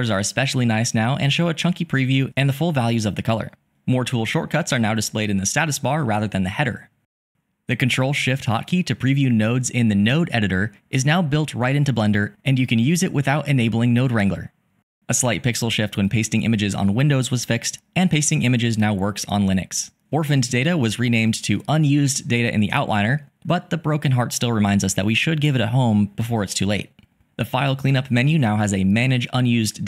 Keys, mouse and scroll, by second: 4.0 typing, 5.2 typing.